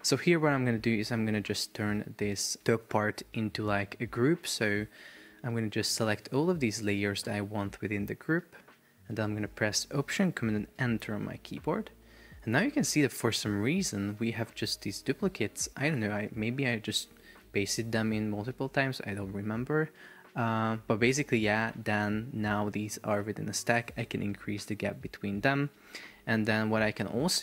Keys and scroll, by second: 2.7 shift+super+4, 3.6 Escape, 4.9 super+BackSpace, 10.8 alt+super+Return, 15.6 BackSpace, 24.4 shift+Up, 24.9 shift+Down, 25.5 shift+Up.